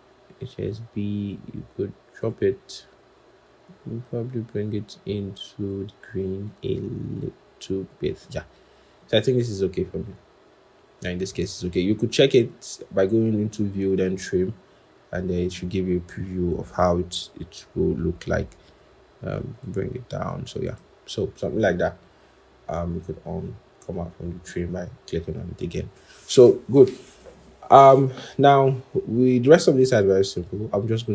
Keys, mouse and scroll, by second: 10.6-11.0 scroll down 1, 12.4-14.0 scroll up 1.